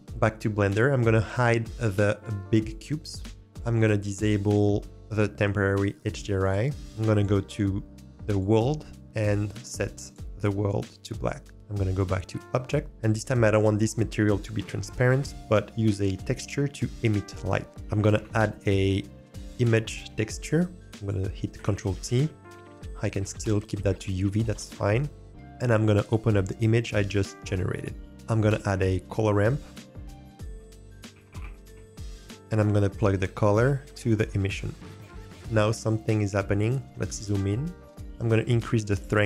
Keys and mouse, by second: 2.6 click, 3.5-6.8 drag, 7.1-8.4 drag, 10.8 click, 11.4 click, 15.5 click, 18.0 shift+a, 21.7 ctrl+t, 22.6 click, 28.4 click, 28.6 shift+a, 31.2 o, 33.0-34.4 drag, 39.0-39.2 drag.